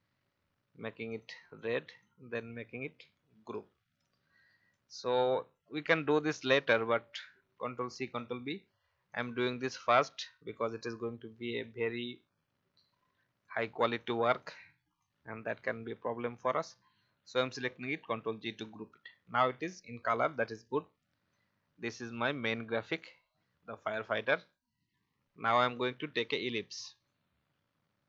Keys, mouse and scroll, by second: 3.3 ctrl+g, 4.0-4.4 alt+scroll down 1, 4.9 click, 9.1 click, 18.3-18.6 alt+scroll down 1, 19.8-21.7 drag, 22.0-22.4 alt+scroll up 1, 22.9-26.6 drag, 27.1-28.0 alt+shift+drag.